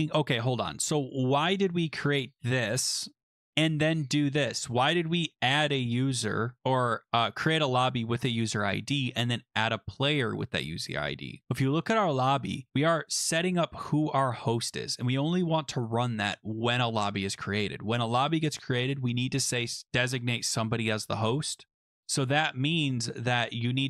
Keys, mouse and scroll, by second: 3.2 click, 4.3 click, 6.6 click, 8.3 click, 8.4 click, 10.5 click, 11.6 click, 13.4 click, 13.9 click, 14.6 click, 15.9 click.